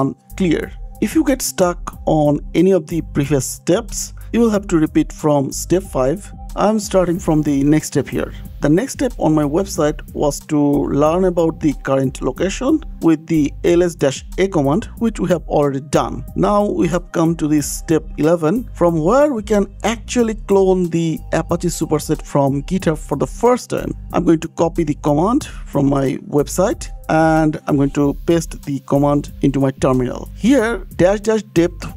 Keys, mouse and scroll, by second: 0.1 click, 1.1 click, 1.2 click, 2.2 scroll, 3.5 click, 6.5 scroll, 8.3 scroll, 8.5 scroll down 10, 8.8 scroll, 10.4 click, 11.1 scroll down 2, 11.5 scroll, 13.6 scroll down 1, 13.6 scroll, 14.5 click, 14.9 scroll, 17.4 click, 19.2 click, 24.7 click, 24.8 click, 24.9 click, 26.9 click, 27.5 click, 28.2 click, 28.8 click, 29.1 ctrl+v, 30.4 click, 31.4 click.